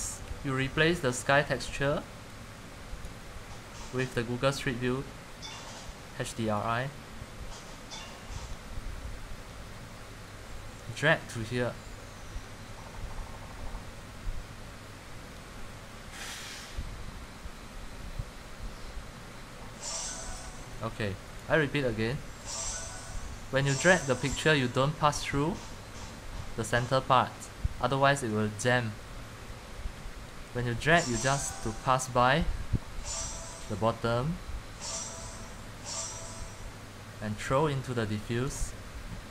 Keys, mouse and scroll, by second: 3.2-8.2 drag, 20.8 click, 38.5 click, 38.6 click.